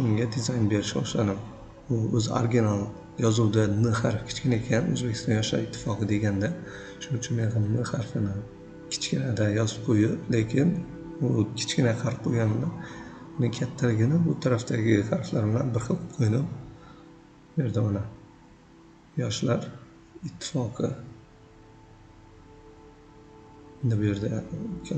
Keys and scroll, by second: 6.9 v, 7.5 ctrl+z, 7.8 v, 12.0 v, 13.5-21.0 typing, 16.0 ctrl+a, 23.8 v.